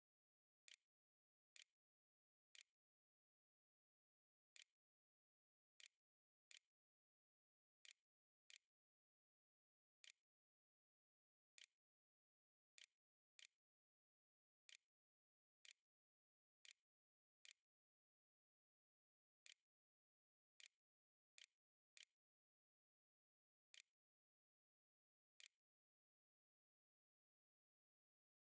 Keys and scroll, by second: 0.0-2.4 typing, 4.4 Tab, 4.6-6.0 typing, 7.7 o, 8.3 i, 9.8 d, 10.9-21.5 typing, 22.6-24.8 typing.